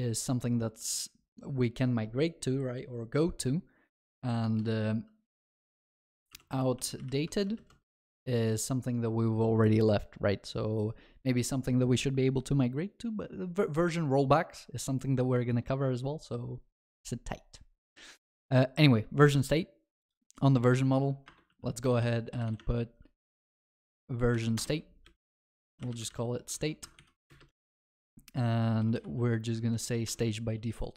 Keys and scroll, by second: 22.7 Tab, 25.4 Return, 26.6 ctrl+s, 30.1 ctrl+s, 30.2 Return.